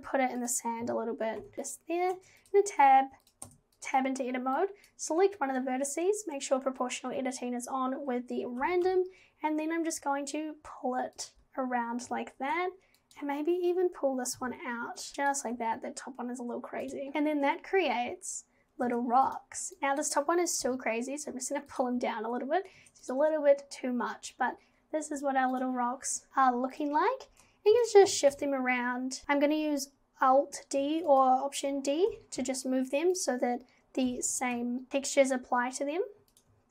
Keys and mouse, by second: 0.8 g, 1.5 g, 2.1 Tab, 2.5 click, 3.2 click, 3.5 Tab, 4.8 click, 8.6 g, 14.4 g, 15.3 click, 15.6 g, 17.1 Tab, 18.9 Tab, 19.8 click, 20.6 g, 22.8 Tab, 25.7 click, 27.7 shift+click, 27.8 shift+d, 29.2 ctrl+z, 30.8 alt+d, 32.1 g, 34.1 g, 36.4 x.